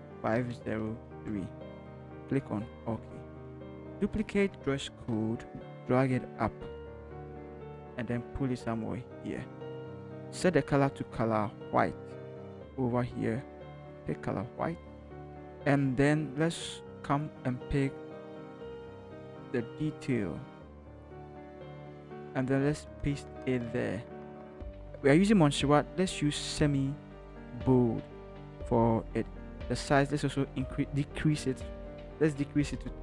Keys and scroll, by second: 0.0-1.1 typing, 5.0 ctrl+j, 7.0 v, 21.6 ctrl+c, 23.2 ctrl+v, 32.8-33.0 typing.